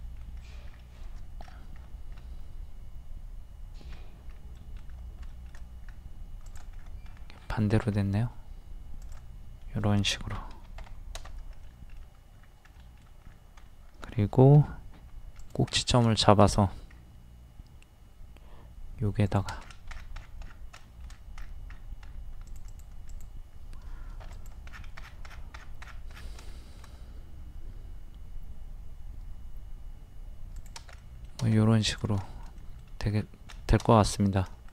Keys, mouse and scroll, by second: 0.0 middle click, 0.5-1.0 scroll down 1, 1.4-1.7 scroll up 1, 4.6 middle click, 5.9-6.4 scroll up 1, 6.4 click, 6.8-7.2 scroll up 1, 7.9-8.3 scroll up 1, 9.0 click, 10.5 KP_1, 11.6 middle click, 12.4 scroll up 1, 12.7 middle click, 13.3-13.7 scroll up 1, 14.5 typing, 15.4 click, 15.8 scroll down 1, 16.1 shift+middle click, 16.6-16.9 scroll up 1, 19.2 click, 19.6-19.9 scroll down 1, 20.9 shift+middle click, 21.1 scroll down 1, 21.7-22.0 scroll up 1, 22.5 click, 24.2 p, 24.3 click, 24.7 scroll down 1, 24.8 scroll up 1, 25.0-25.4 scroll down 1, 26.5 scroll up 1, 26.5 middle click, 30.6 click, 31.0 middle click, 31.9 click, 32.3 shift+middle click, 33.2-33.5 scroll up 1, 33.6 shift+middle click, 34.1 scroll up 1, 34.5 middle click.